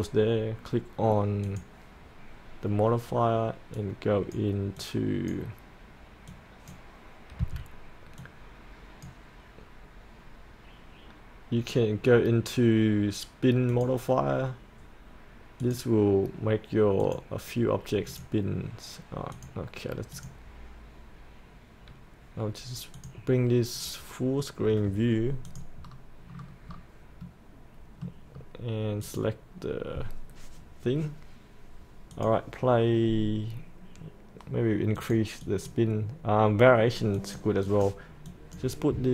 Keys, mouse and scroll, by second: 24.6-25.4 scroll up 1, 25.5 click, 25.8-26.3 scroll up 1, 26.3 scroll down 1, 27.0 scroll up 1, 27.3-28.6 middle drag, 29.0 click.